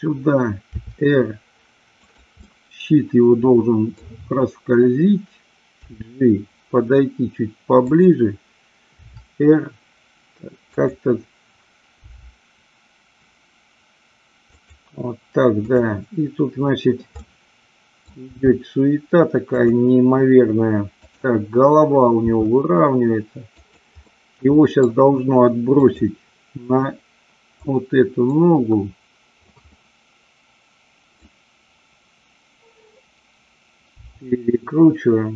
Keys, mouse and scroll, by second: 0.8 r, 2.0 click, 2.4-4.0 middle drag, 5.8 g, 7.9 click, 8.9 r, 10.7 click, 12.0 g, 14.6 click, 15.7-16.7 drag, 17.2 middle click, 18.3 r, 19.6 click, 20.9-22.0 drag, 22.2 r, 23.6 click, 24.0-24.8 middle drag, 25.8-26.8 drag, 27.7-29.6 drag, 29.7-31.2 middle drag, 33.9 r.